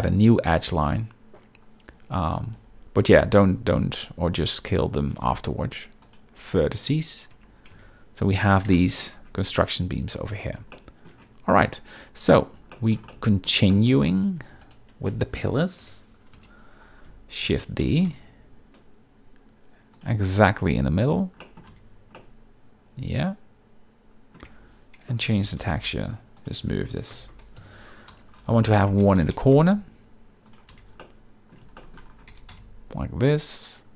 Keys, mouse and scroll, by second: 3.1 z, 5.1 x, 7.3 Tab, 7.7 z, 8.8 shift+middle click, 10.7-11.1 shift+middle drag, 12.7 shift+middle click, 13.1-13.5 middle drag, 13.7 shift+middle drag, 14.6 click, 15.8 KP_7, 16.3 z, 17.4 shift+d, 17.5 shift+right click, 17.8 g, 18.1 x, 21.4 middle click, 21.7 z, 22.2-24.3 middle drag, 24.5 Tab, 25.3 g, 25.6 y, 26.4 click, 26.6 Tab, 27.6-29.5 typing, 28.6 shift+middle drag, 30.5 click, 30.7 z, 31.0-31.5 middle drag, 31.8 shift+middle click, 32.3 g, 32.5 x.